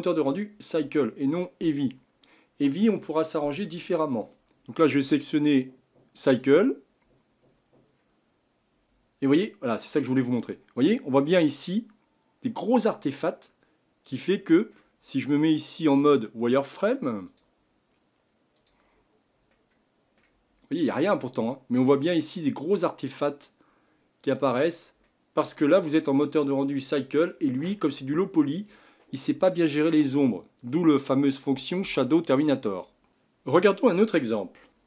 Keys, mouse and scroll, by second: 4.4-5.1 middle drag, 5.1-7.4 drag, 7.4-7.8 scroll up 5, 9.2-15.9 middle drag, 15.9 click, 17.3-18.6 drag, 19.5-28.0 middle drag.